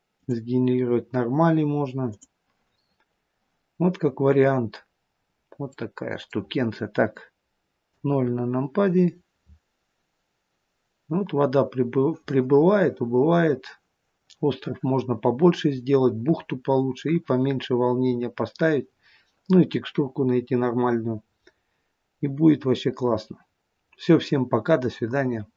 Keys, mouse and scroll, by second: 0.1 click, 2.1 click, 3.9-4.6 scroll up 3, 5.2 scroll up 2, 5.6 middle click, 7.8 KP_0, 9.3 scroll up 1, 10.1 scroll up 5.